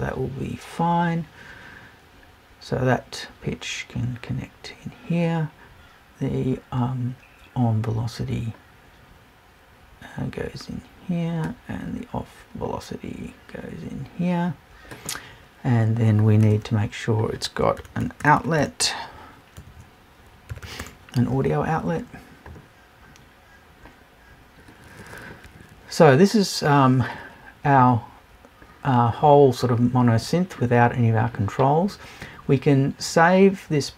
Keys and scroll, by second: 19.6 BackSpace.